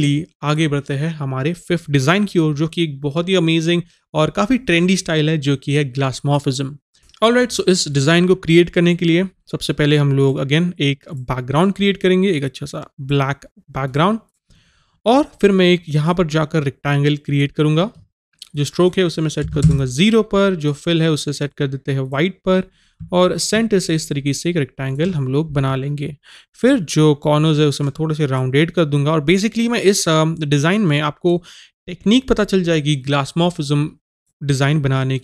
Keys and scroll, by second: 19.5 KP_0.